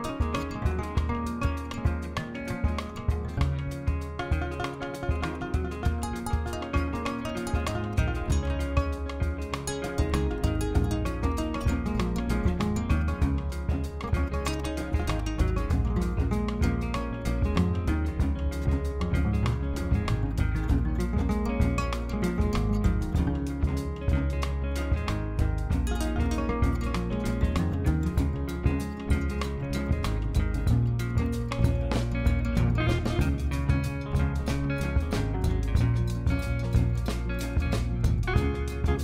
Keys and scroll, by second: 2.6 ctrl+l, 3.7 alt+a, 12.2 ctrl+l, 19.6 ctrl+l, 20.6 alt+a, 22.0 Tab, 22.6 3, 25.2 Tab, 29.0 ctrl+j, 29.5 ctrl+z.